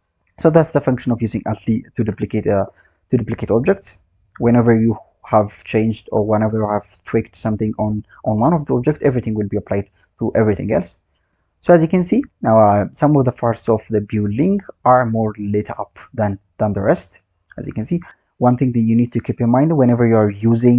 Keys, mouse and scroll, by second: 2.0 KP_0, 4.6 click, 16.5-18.1 drag.